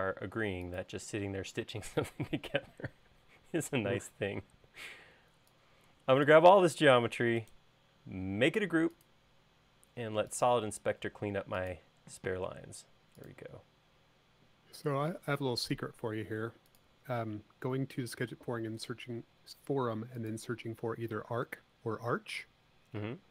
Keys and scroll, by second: 1.7 space.